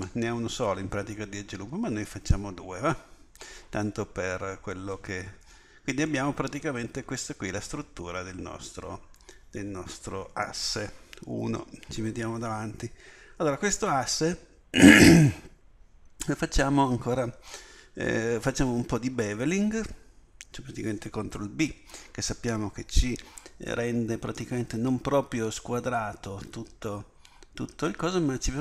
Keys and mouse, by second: 5.4 z, 11.3 KP_1.